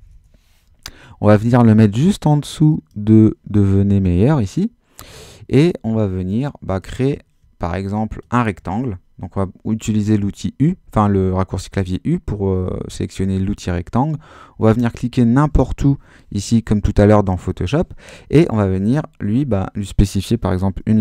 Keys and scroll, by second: 0.0-0.5 typing, 20.5-21.0 typing.